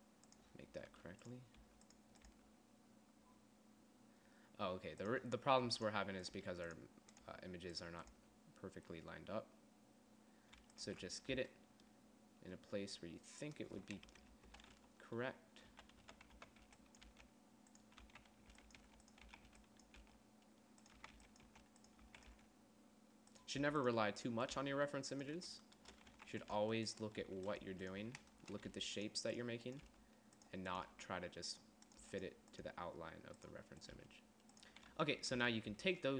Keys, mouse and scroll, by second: 0.0-0.1 typing, 1.5 g, 2.1 g, 2.9 g, 6.2 g, 6.9 g, 7.8 g, 8.7 g, 11.4 z, 11.9 Tab, 14.6-22.9 typing, 15.0 Tab, 18.3 click, 19.6 click, 24.1 g, 25.1 g, 26.7 a, 27.1 g, 27.8 z, 28.1 g, 29.2 g, 30.4 g, 31.4 g, 32.5 g, 33.2 g, 34.5 g, 35.5 z, 35.9 Tab.